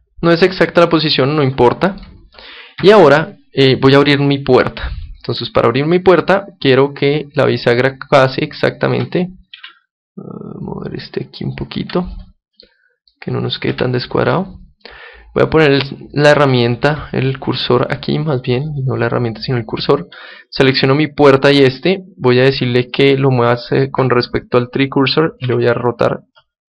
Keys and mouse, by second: 2.8 KP_7, 4.5 middle click, 5.2-7.0 right drag, 7.0 middle click, 7.5-9.2 right drag, 9.1-10.6 middle drag, 9.6 g, 11.7-20.4 drag, 20.5-22.2 right drag, 22.3 middle click, 22.8-25.4 drag, 25.4 r, 26.2 click.